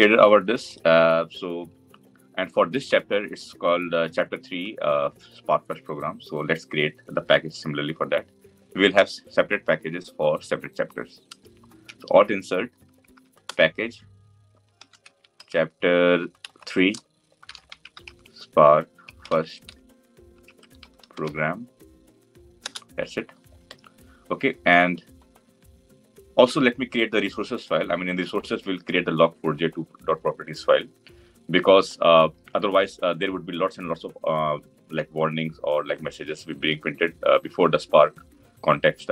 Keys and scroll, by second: 11.6 alt+Insert.